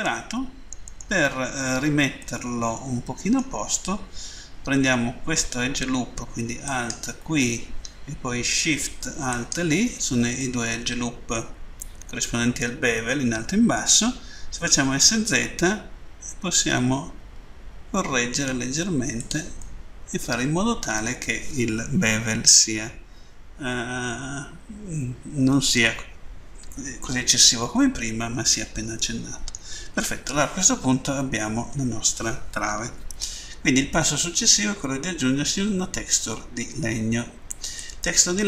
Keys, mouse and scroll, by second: 0.7 middle click, 0.9 middle click, 2.2 middle click, 6.6 alt+right click, 9.3 alt+right click, 10.3 middle click, 14.8 typing, 19.1 click, 19.5 middle click, 37.7 click.